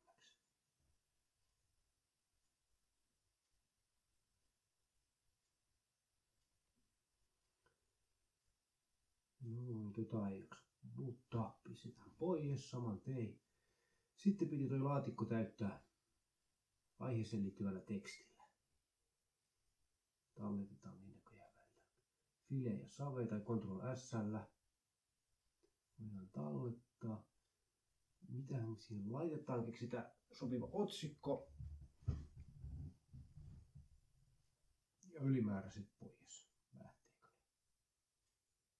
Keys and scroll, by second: 9.6 Delete, 18.8 ctrl+s, 32.0-37.0 typing, 37.9 ctrl+shift+Right, 38.2 Delete, 38.4 ctrl+shift+Right, 38.6 Delete.